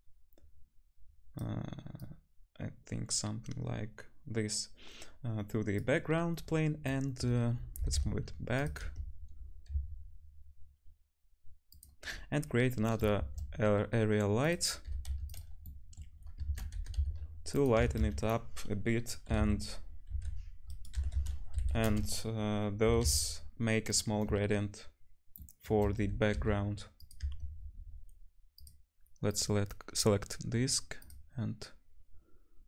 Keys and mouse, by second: 6.2-7.0 right drag, 7.8 g, 8.8 right click, 8.8 `, 9.8 s, 11.8-12.6 right drag, 13.2 shift+a, 14.9 g, 15.6 right click, 16.5 ctrl+z, 16.8 g, 17.8 r, 20.9 r, 22.8 g, 27.8-31.2 drag, 28.6-31.2 middle drag, 28.6-32.6 right drag.